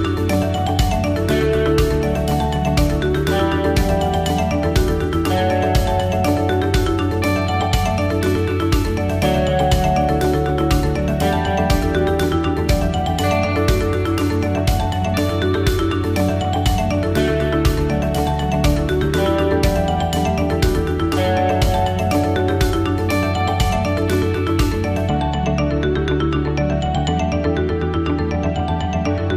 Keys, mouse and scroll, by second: 0.7 click, 4.0 middle click, 24.8 f, 27.4 click, 28.4 click.